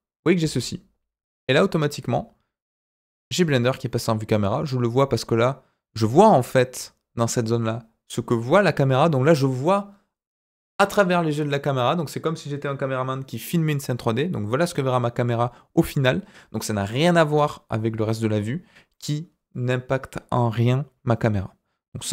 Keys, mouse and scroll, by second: 16.8-18.1 middle drag, 18.2 scroll down 2.